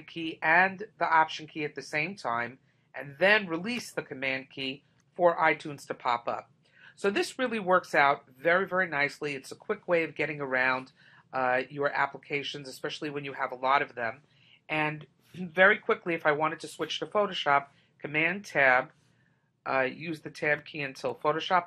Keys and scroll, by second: 18.2 super+Tab.